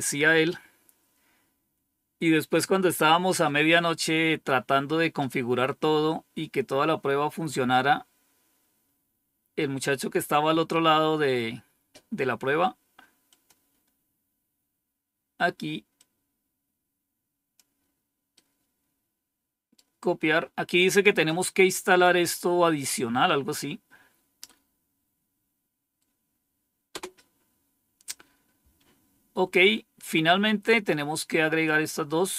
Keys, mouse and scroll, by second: 8.5-9.2 scroll down 2, 11.5 scroll down 2, 13.2 click, 13.6 click, 15.9-17.5 drag, 18.2-20.3 right drag, 24.3-25.9 right drag, 26.8 Return, 29.4 scroll down 1, 31.5-32.3 drag.